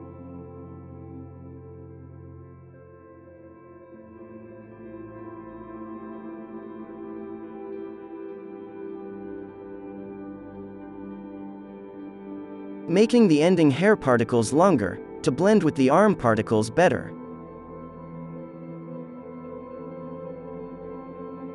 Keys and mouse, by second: 1.6 middle click, 1.7 KP_1, 2.7-3.9 drag, 2.7 right click, 4.1 KP_5, 4.3-6.1 middle drag, 5.3-6.6 drag, 5.3 right click, 7.1-8.3 middle drag, 7.2 n, 8.1-16.7 drag, 10.3 f, 10.8 f, 11.7 f, 13.2-17.8 middle drag, 13.2-15.8 right drag, 16.8-18.0 drag, 18.4-19.7 drag, 18.5 f, 19.2-20.7 middle drag, 19.3 right click, 20.0-21.5 drag, 20.2 right click, 21.0 f.